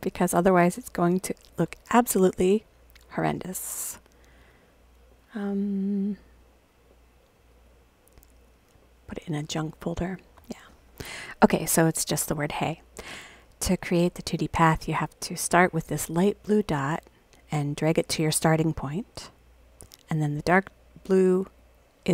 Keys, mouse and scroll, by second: 3.3 click, 7.5 click, 7.6 click, 8.3 click, 8.4 click, 9.1 click, 10.0 click, 17.8-19.7 drag, 21.6-22.1 drag.